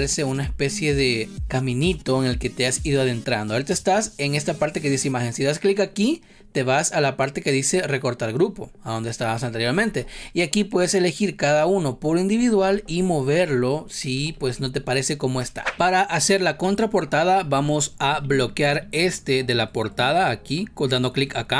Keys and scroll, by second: 9.8 ctrl+z, 11.5 ctrl+z, 12.6 ctrl+z, 14.3 ctrl+z, 15.4 ctrl+z.